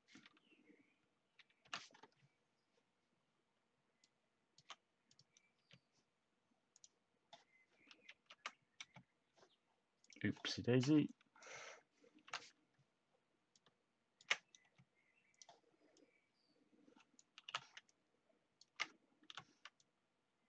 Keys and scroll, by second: 1.6 k, 5.5 space, 8.1 ctrl+z, 8.7 space, 14.6 space.